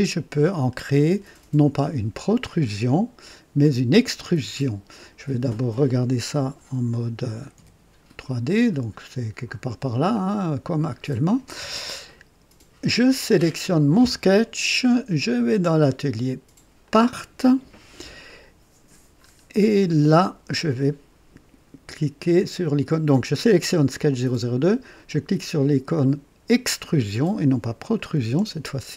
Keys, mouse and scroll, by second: 7.5 &, 10.1 click, 10.8 click, 11.6 scroll up 1, 12.0 right click, 13.7 click, 17.0 click, 18.3 click, 19.2 scroll up 1, 19.8 right click, 27.9 click.